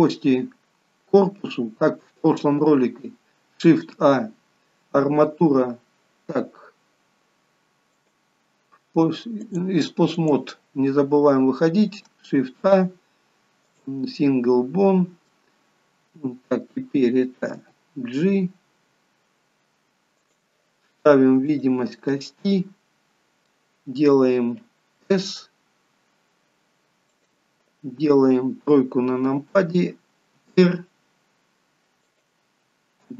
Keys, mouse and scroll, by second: 8.0 click, 9.5 click, 12.5 shift+a, 15.3 middle click, 17.5 g, 21.6 click, 22.1 middle click, 25.0 s, 28.6 KP_3, 30.4 r.